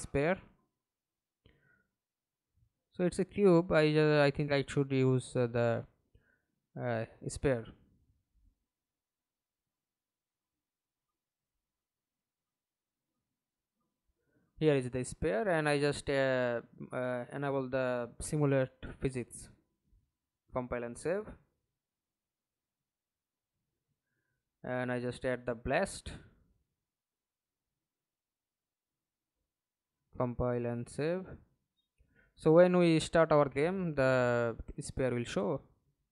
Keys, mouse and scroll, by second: 1.7 right click, 7.6 right click, 8.4 ctrl+space, 9.2 double click, 10.9-11.5 scroll down 2, 11.5 right click, 14.7-15.2 scroll down 9, 15.2-18.2 scroll up 4, 20.6 scroll up 10, 25.4 b, 26.2 l, 32.5 middle click, 33.4 F11, 33.9 alt+p, 35.3-36.1 typing.